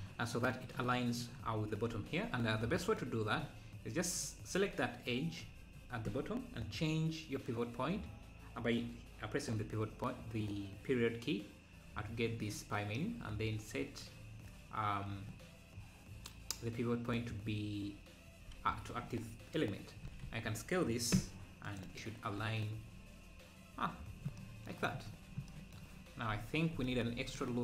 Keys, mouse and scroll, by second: 0.1-1.7 scroll up 2, 7.8 shift+Left, 20.1 s, 26.4 s, 26.9 ctrl+r.